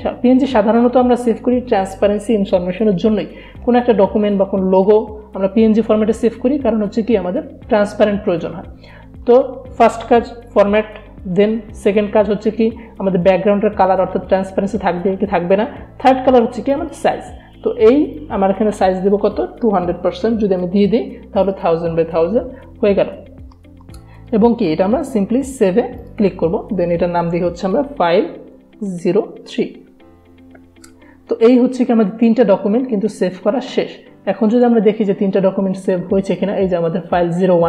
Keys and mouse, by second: 16.8 click, 21.5 click, 24.4 click, 27.4-28.6 typing, 34.7-37.6 drag.